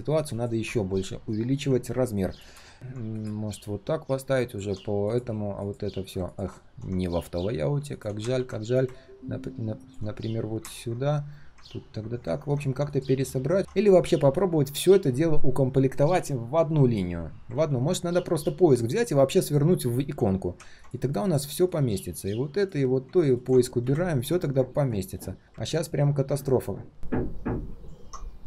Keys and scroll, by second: 8.3 ctrl+g, 13.6 ctrl+z, 17.5 ctrl+z.